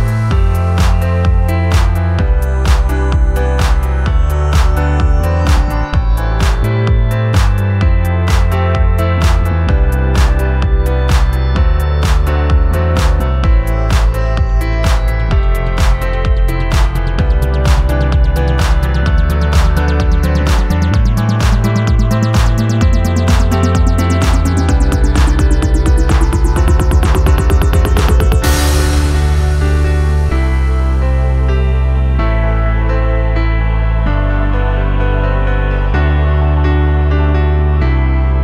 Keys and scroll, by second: 7.2 ctrl+g, 11.1 ctrl+g, 14.8 ctrl+g, 20.3 alt+space, 22.3 shift+Left, 23.0 shift+Left, 23.6 shift+Left, 26.0 shift+Left, 27.5 Left.